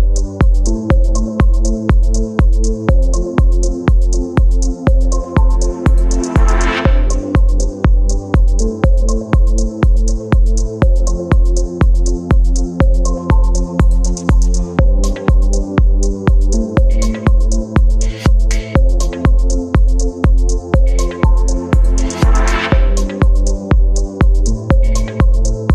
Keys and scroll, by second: 7.3 space, 13.8 space, 16.4 space, 18.2 v.